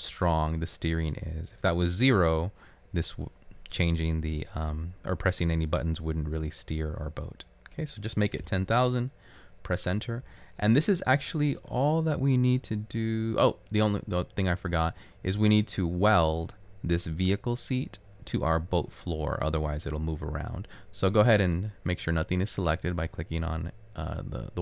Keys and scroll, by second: 8.9 Return.